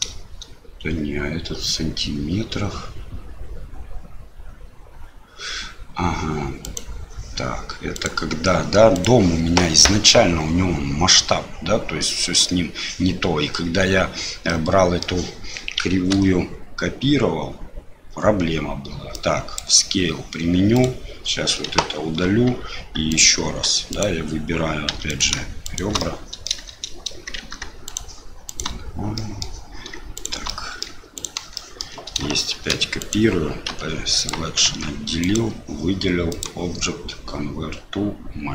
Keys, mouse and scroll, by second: 6.6 right click, 7.9 right click, 8.9 right click, 14.4 middle click, 16.1 ctrl+a, 20.7 right click, 21.7 Delete, 23.1 click, 23.4 Tab, 23.9 click, 24.9 2, 25.1 click, 25.6 shift+click, 26.0 middle click, 27.4 shift+z, 27.8 shift+click, 28.4 shift+click, 29.1 middle click, 30.1 shift+click, 30.4 middle click, 31.1 shift+click, 31.5 shift+middle click, 32.5 shift+d, 33.7 p, 34.6 Tab, 35.2 click, 36.4-38.5 drag.